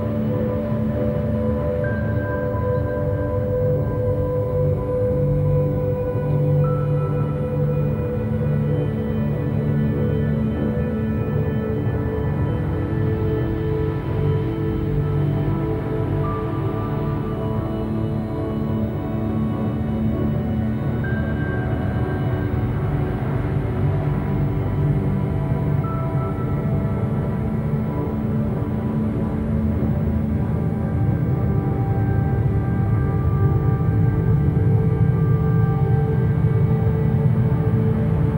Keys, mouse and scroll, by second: 3.1 Tab, 3.5 3, 3.7 click, 3.9 click, 4.4 a, 4.6 a, 4.9 click, 5.0 click, 5.8 KP_1, 6.8 shift+middle click, 7.4 scroll up 1, 7.8 a, 8.0 a, 8.5 ctrl+r, 11.3 scroll down 3, 11.6 a, 12.0 middle click, 12.4 Tab, 12.7 a, 12.9 a, 13.0 click, 13.6 KP_7, 14.9 s, 16.7 KP_1, 17.3-18.2 scroll up 6, 18.2 g, 19.4-19.8 shift+middle drag, 19.8-20.2 scroll up 4, 20.4 g, 23.0-23.8 scroll down 9, 23.8 a, 24.0 a, 24.4-25.6 shift+middle drag, 25.6 z, 25.9 b, 26.9-27.3 scroll down 1, 27.3 g, 29.2 a, 29.4 a, 29.7 click, 31.1 alt+g, 31.5 scroll up 2, 31.8 a, 32.0 a, 32.3-33.3 shift+middle drag, 33.3 z, 33.7-34.1 shift+middle drag, 34.1-34.5 scroll up 1, 34.5 click, 34.8 Tab, 35.7 Tab, 37.0 Tab, 37.4 2, 37.7 click, 37.9 click.